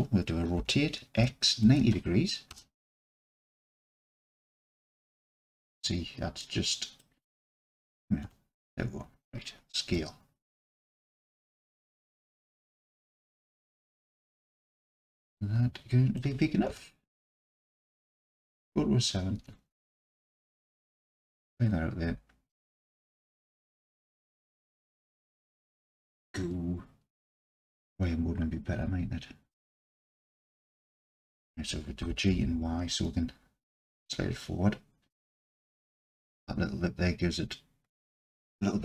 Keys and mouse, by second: 0.6 r, 1.2 x, 1.6 KP_9, 1.8 KP_0, 2.5 KP_Enter, 3.6-4.0 alt+middle drag, 4.0 alt+click, 5.6 KP_Decimal, 6.4-7.0 middle drag, 7.5-7.9 middle drag, 8.2 KP_Decimal, 9.9 s, 12.3 click, 14.3-16.2 drag, 16.7 KP_Decimal, 18.4 KP_7, 20.7-25.6 drag, 30.0-30.4 middle drag, 32.0 g, 32.3 y, 35.4 shift+click.